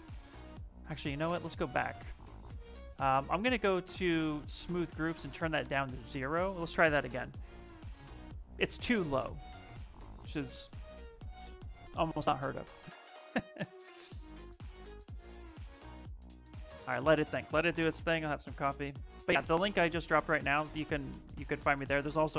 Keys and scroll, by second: 0.0 ctrl+z, 1.1 ctrl+z, 1.6 ctrl+z.